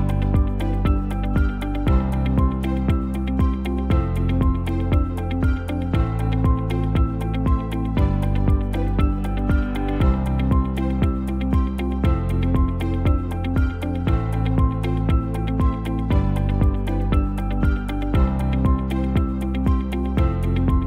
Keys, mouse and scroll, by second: 1.3 scroll down 1, 1.8 shift+middle click, 1.9 click, 3.1 g, 6.3 shift+middle click, 6.8 click, 7.7 g, 10.0 alt+s, 15.1 Tab, 15.2-16.0 scroll down 1, 16.0 KP_7, 16.7 shift+z, 17.9 middle click, 18.7 shift+middle click, 20.2 ctrl+s.